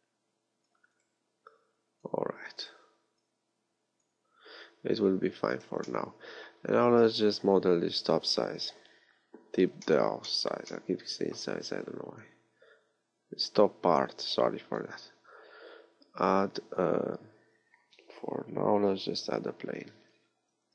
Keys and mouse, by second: 1.0 right click, 4.7 z, 5.3 z, 5.7 a, 9.0 KP_1, 14.6 shift+a, 20.6 r.